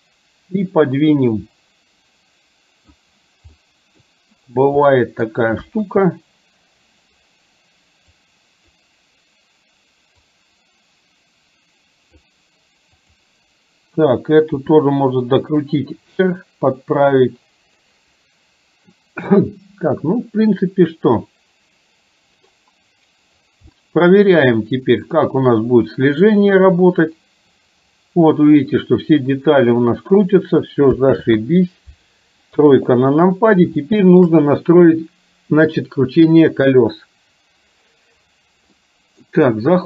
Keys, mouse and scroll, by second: 0.8-2.9 drag, 3.7 middle click, 5.0 middle click, 5.7 KP_1, 8.2 click, 10.4-12.3 drag, 13.0 click, 14.7 r, 23.8-24.4 middle drag, 26.5-30.3 drag, 31.2 ctrl+z, 32.7 KP_3, 33.9 middle click, 38.9 middle click.